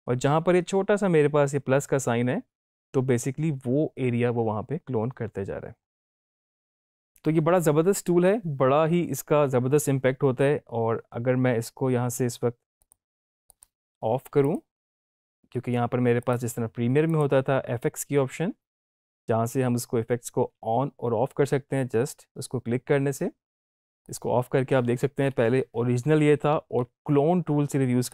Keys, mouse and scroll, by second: 12.7 click, 24.0 click, 28.0 click.